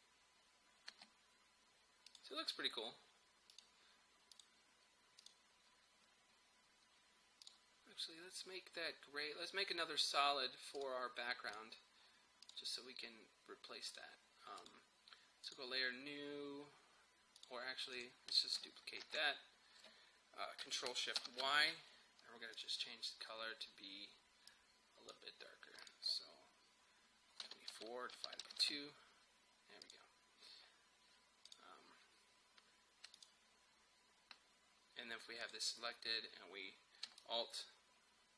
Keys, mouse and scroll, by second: 0.9 space, 2.1 click, 10.8 click, 19.1 ctrl+d, 21.2 ctrl+shift+y, 22.6-25.9 drag, 27.2-29.0 typing, 29.9 click, 35.5 click, 37.3-38.3 alt+drag.